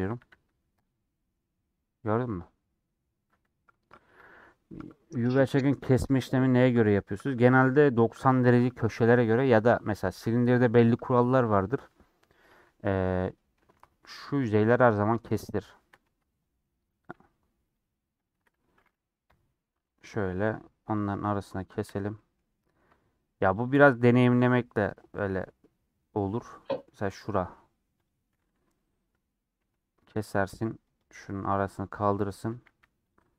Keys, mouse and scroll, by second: 2.1 scroll up 1, 2.1-13.8 middle drag, 13.8 3, 16.1 ctrl+z, 16.2 scroll up 1, 16.4-17.8 middle drag, 17.8 alt+shift+click, 18.3 alt+shift+click, 19.3 ;, 20.0 middle click, 20.3 2, 22.1-23.6 middle drag, 23.6 shift+click, 24.3-26.2 middle drag, 26.2-26.6 scroll up 1, 26.6 middle click, 27.0 3, 29.6 ;, 30.9 click, 31.8-32.5 scroll down 1, 32.5 a.